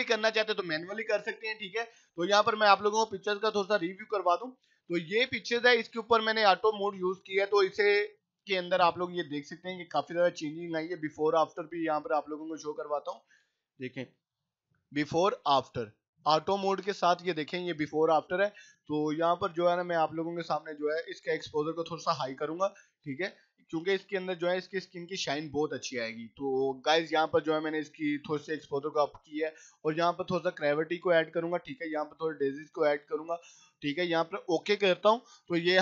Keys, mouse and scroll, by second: 14.1 p, 15.8-16.5 typing, 18.5 typing, 18.8-23.3 drag, 23.5 right click, 24.1 click, 30.5-31.6 drag.